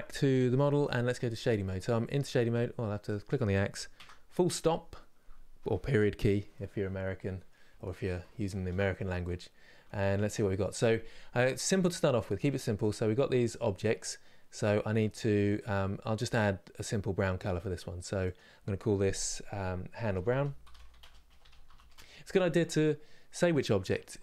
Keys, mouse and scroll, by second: 0.0 click, 1.1 scroll up 4, 1.8 scroll down 4, 2.7 click, 3.6 KP_Decimal, 4.3 scroll down 4, 6.3-9.1 middle drag, 9.1 scroll up 2, 9.6-12.4 shift+middle drag, 12.4 click, 21.6-24.2 drag.